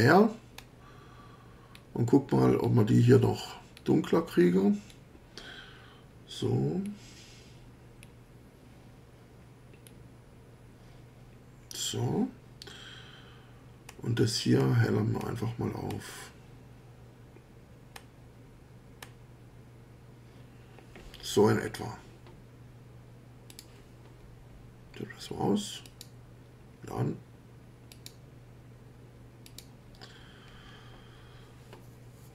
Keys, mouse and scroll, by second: 0.6 scroll up 2, 1.7 scroll down 2, 2.6 scroll down 2, 4.9 scroll down 2, 6.8 scroll down 2, 8.0 scroll down 2, 9.8 scroll down 2, 13.9 scroll up 2, 14.6 scroll up 2, 15.2-16.1 scroll up 4, 18.0 scroll up 2, 19.0 scroll up 2, 23.5 click, 25.9 click, 27.9 click, 29.5 click.